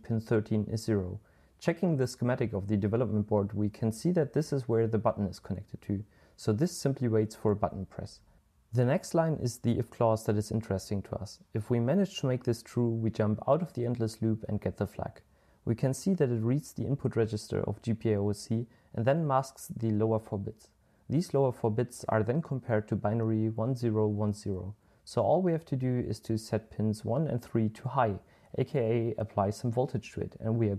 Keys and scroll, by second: 5.4-7.0 typing, 23.9-26.5 typing.